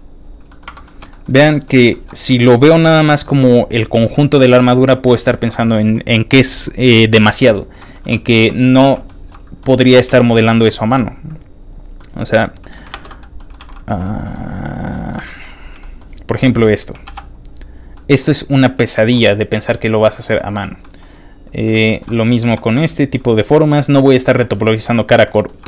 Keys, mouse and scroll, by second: 0.0-0.2 typing, 0.2 click, 0.5 middle click, 0.6 Tab, 0.8 middle click, 1.1 shift+middle click, 1.5 middle click, 1.7 middle click, 1.9 middle click, 2.1 scroll up 2, 2.2 middle click, 2.8 middle click, 3.1 middle click, 3.3 middle click, 4.4 middle click, 5.2 shift+middle click, 6.8 shift+middle click, 7.8 shift+middle click, 8.0 shift+middle click, 8.8 middle click, 8.8-9.4 scroll up 3, 9.0 shift+middle click, 9.6 shift+middle click, 9.7 scroll down 2, 9.9 middle click, 10.7 middle click, 11.6 click, 12.0 middle click, 12.9 ctrl+space, 13.2 middle click, 13.2 scroll down 2, 13.4 shift+middle click, 13.6 alt+shift+z, 14.0 shift+middle click, 14.6 click, 14.9 shift+middle click, 15.2 shift+middle click, 15.8 shift+middle click, 16.4 shift+click, 17.0 shift+b, 17.2 click, 17.5-17.9 scroll down 4, 17.9 shift+middle click, 18.4 scroll down 1, 18.5 middle click, 19.1 alt+shift+z, 19.1 scroll down 3, 19.6 middle click, 20.3 shift+middle click, 20.6 shift+middle click, 20.8 shift+middle click, 21.3 shift+click, 21.4 scroll down 1, 21.6 shift+middle click, 21.8 shift+middle click, 22.2 scroll down 2, 22.6 shift+click, 22.8 shift+middle click, 23.2-24.7 shift+middle drag, 23.7 scroll down 1, 25.2 shift+middle click.